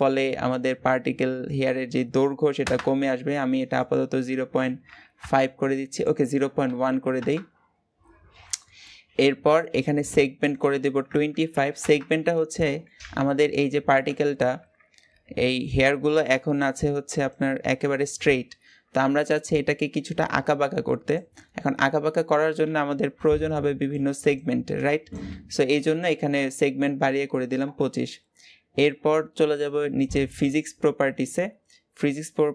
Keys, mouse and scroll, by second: 2.4 click, 5.0-8.0 drag, 8.0 scroll up 2, 8.6-11.6 shift+middle drag, 11.6-32.5 drag.